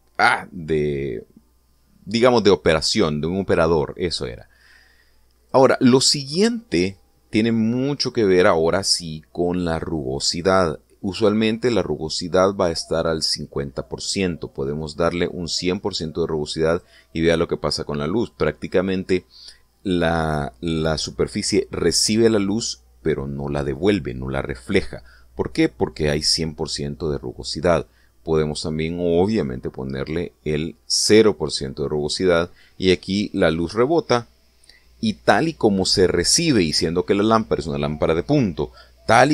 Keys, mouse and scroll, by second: 5.6-6.5 drag, 15.5-17.9 drag, 29.4-31.2 drag.